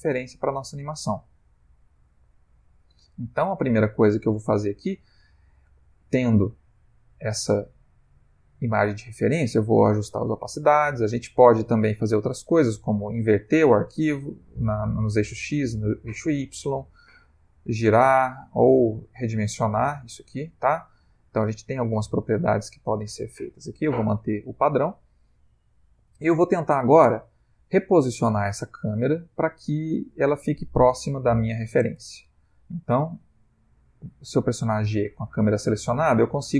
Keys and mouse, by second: 2.7 Escape, 6.6 click, 13.4 click, 15.3 click, 15.7 click, 17.1 click, 18.7 click, 33.7 g.